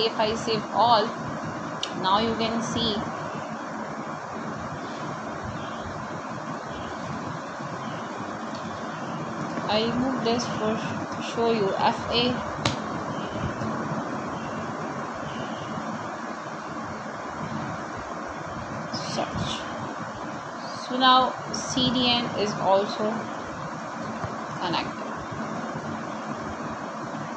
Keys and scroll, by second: 2.1-4.7 typing, 8.4 shift+..